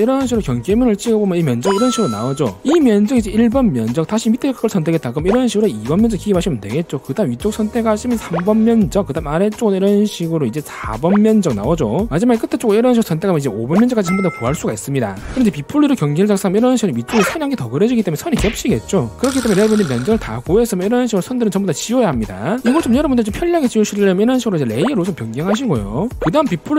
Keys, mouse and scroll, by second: 1.4 click, 5.0 click, 8.0 click, 10.8 click, 13.5 click, 21.3 e, 21.5 right click, 22.0 click, 22.2 right click, 25.2 click, 25.2 right click.